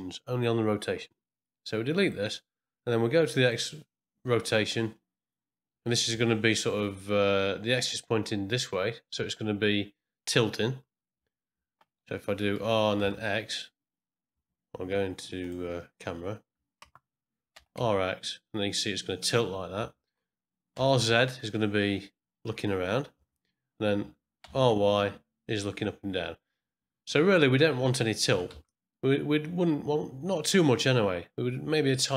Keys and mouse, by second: 2.0 click, 3.4 click, 12.5 r, 15.4 click, 16.8 KP_0, 17.5 r, 20.7 r, 24.4 r, 28.3 r.